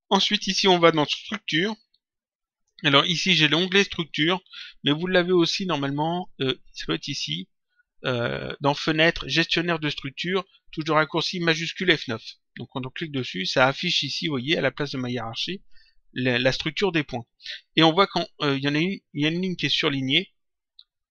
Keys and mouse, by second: 6.0 click, 13.0 click.